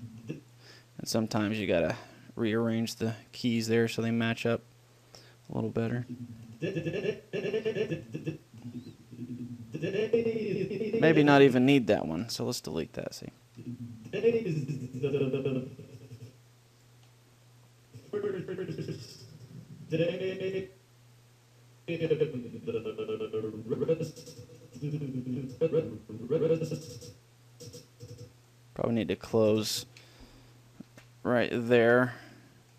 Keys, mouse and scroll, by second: 1.6 a, 1.8 b, 3.4 middle click, 3.4 click, 4.3 g, 5.0 middle click, 5.8-7.4 drag, 12.5 Delete, 13.5-15.3 drag, 17.4 middle click, 18.2-20.0 drag, 21.0-22.2 middle drag, 22.2-24.0 drag, 29.6-31.2 drag, 31.1 ctrl+l, 32.1 ctrl+l.